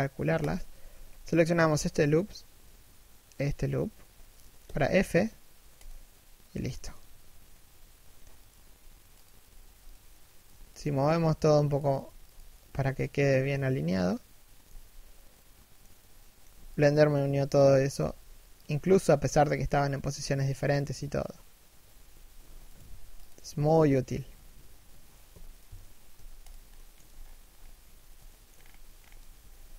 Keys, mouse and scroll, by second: 0.1 alt+shift+right click, 0.6 z, 3.7-4.3 scroll down 1, 4.3 f, 8.1 right click, 8.1 g, 9.1 right click, 10.1 g, 11.6 right click, 11.7 g, 12.2 right click, 12.3 g, 14.3 z, 15.0 middle click, 16.1 z, 16.4 right click, 17.1 KP_1, 17.6 g, 18.4 a, 21.7 z, 22.4 right click, 22.5 g, 23.1 a, 25.0 l, 25.8 x, 26.4 shift+middle click, 26.7 z, 26.8-27.9 scroll up 1, 27.9 shift+middle click, 28.1 scroll up 1, 29.1 z, 29.4 shift+middle click.